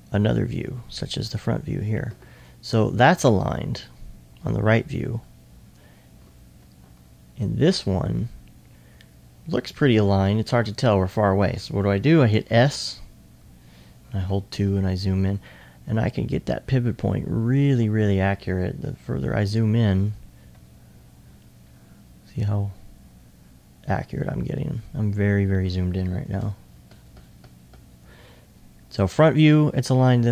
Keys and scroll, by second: 1.2 1, 12.3 s, 13.7-14.6 typing, 16.0 2, 18.7 2, 20.5 2, 22.0 2, 26.3 2, 27.9 2.